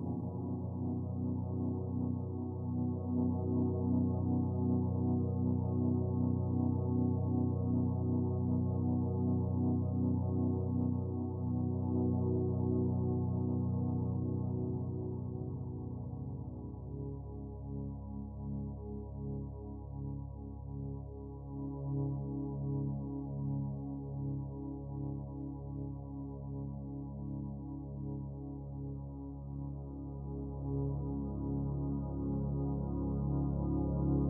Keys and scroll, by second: 2.8 ctrl+t, 16.5 ctrl+j, 17.2 ctrl+t.